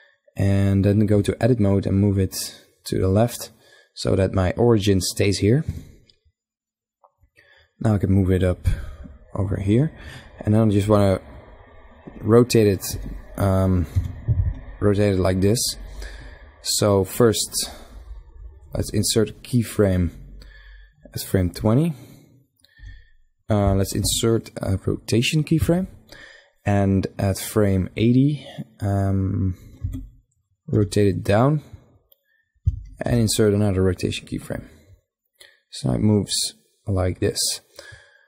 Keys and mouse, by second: 0.7 Tab, 1.6-3.3 drag, 5.2 Tab, 5.8-8.2 drag, 10.5 middle click, 12.4 r, 13.7-14.7 middle drag, 16.9 middle click, 17.9 click, 19.6 middle click, 20.5-22.2 drag, 22.4 e, 23.2 i, 27.5-29.3 drag, 29.3 r, 32.6 i, 35.2-36.9 drag.